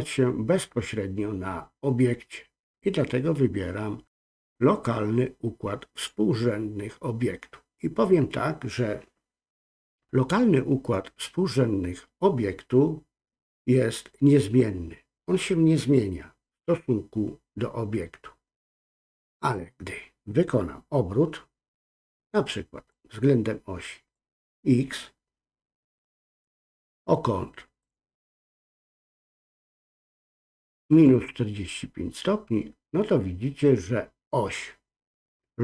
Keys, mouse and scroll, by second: 22.9-24.1 drag, 26.4 click, 27.8-30.1 drag.